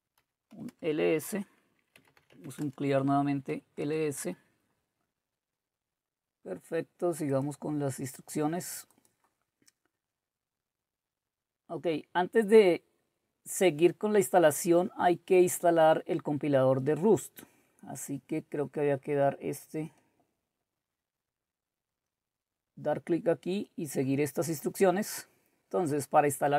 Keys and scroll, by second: 0.0-4.3 typing.